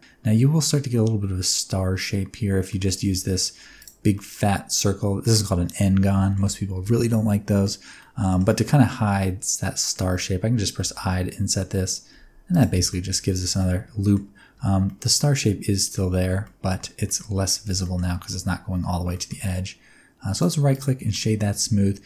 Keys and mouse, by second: 2.6 middle click, 2.9 Tab, 3.6 3, 4.1-5.2 middle drag, 5.6 middle click, 7.6 middle click, 7.9 middle click, 8.2 middle click, 8.4-9.9 middle drag, 10.8 i, 12.4 click, 12.6 Tab, 12.8 middle drag, 13.5 middle click, 14.5 z, 14.8-15.9 middle drag, 16.0 z, 16.4 middle click, 17.0 shift+middle click, 17.8 shift+middle click, 19.1 shift+middle drag, 20.3 click, 21.0 shift+middle drag, 21.3-22.0 middle drag.